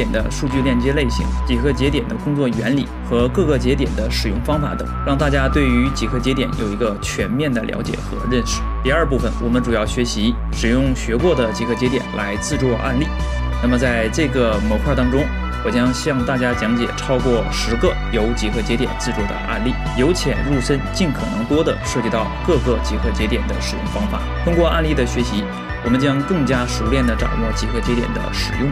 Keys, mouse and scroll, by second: 0.5 middle click, 1.4 click, 1.6 click, 2.7 click, 3.3 ctrl+j, 3.3 F2, 4.1 g, 5.2 middle click, 5.5 middle click, 6.2 middle click, 6.2 space, 6.8 middle click, 7.9 middle click, 8.1 ctrl+s, 13.6 shift+middle click, 14.4 middle click, 14.7 g, 14.8 middle click, 15.0 middle click, 15.2 shift+a, 15.9 shift+d, 16.2 middle click, 16.4 click, 17.2 click, 17.5 click, 18.1 click, 18.8 drag, 19.0 KP_7, 19.2 ctrl+space, 19.2 g, 19.2 r.